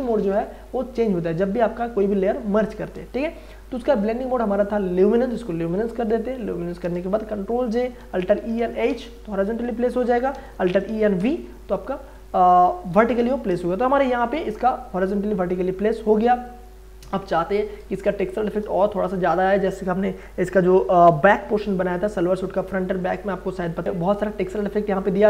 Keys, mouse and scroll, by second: 6.3 space, 6.5 ctrl+click, 7.5 ctrl+j, 7.9 ctrl+a, 8.3-9.4 typing, 10.3 ctrl+a, 10.6 alt+e, 10.9 a, 11.2 v, 13.2 ctrl+d, 13.5 ctrl+space, 13.9 ctrl+click, 14.1 ctrl+space, 16.6 ctrl+click, 16.7 ctrl+space, 21.7 ctrl+o, 23.4 ctrl+o, 23.8 ctrl+scroll up 1.